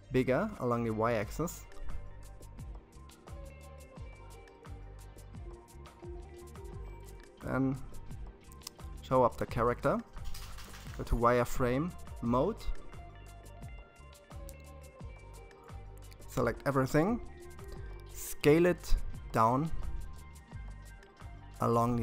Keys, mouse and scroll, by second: 1.1 g, 6.0 click, 7.3-7.7 scroll down 3, 9.2 shift+z, 12.3 KP_3, 14.0-16.5 scroll up 4, 16.5 s, 20.9 s.